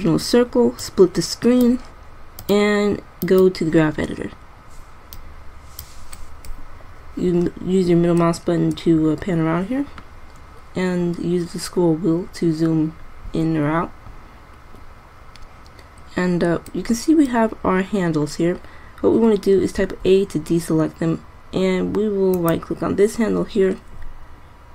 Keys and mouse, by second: 20.0 a.